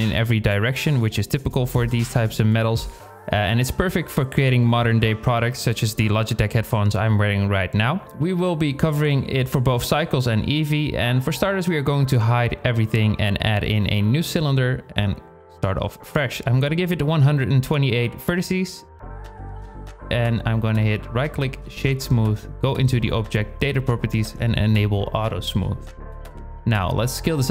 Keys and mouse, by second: 12.8 click, 13.1 x, 13.1 shift+a, 15.7-18.0 drag, 20.2 click, 22.6 click, 25.7 click, 26.7 s.